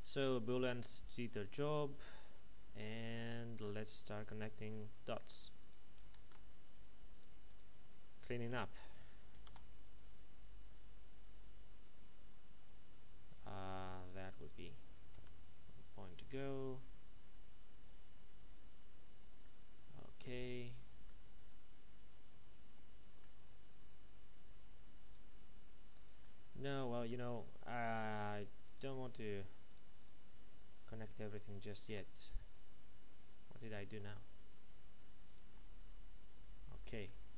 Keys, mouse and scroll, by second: 2.0 shift+right click, 3.1 middle click, 3.9-4.7 scroll up 1, 4.7 shift+middle click, 5.6 right click, 6.3 ctrl+Tab, 6.6 click, 7.1 right click, 7.5 shift+right click, 8.5 alt+m, 9.3 Down, 9.4 Return, 14.1 right click, 19.4 middle click, 25.0 right click, 26.2 middle click, 28.6 right click, 29.7 shift+right click, 31.9 x, 32.2 click, 33.8 x, 34.5 click, 35.2 right click, 35.4 x, 35.7 click, 36.8 middle click.